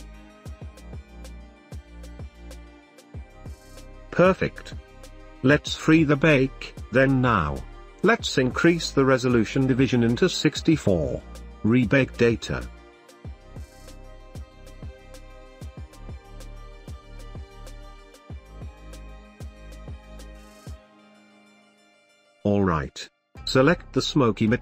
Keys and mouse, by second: 0.3 space, 1.0-2.0 shift+middle drag, 5.2 space, 5.8 click, 9.1 ctrl+s, 9.8-11.3 drag, 16.3-16.8 middle drag, 16.8 space, 22.3 space.